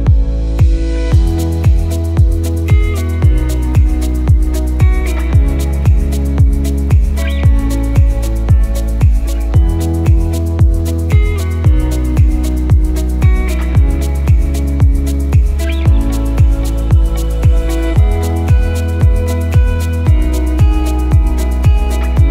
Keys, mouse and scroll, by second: 1.7-2.2 scroll down 1, 2.5 click, 3.5 Delete, 4.2 shift+a, 8.7 click, 11.5-11.9 scroll up 1, 13.3 click, 16.5 click, 20.3 click.